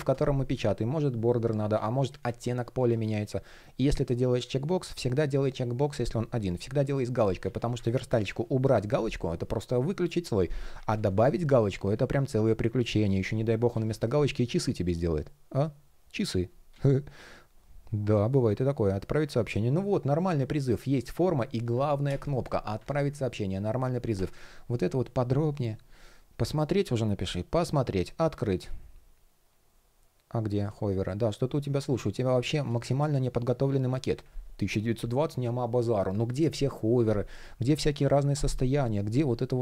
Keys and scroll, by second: 3.0 shift+p, 10.5 super+z, 12.5 shift+p, 14.3 shift+p.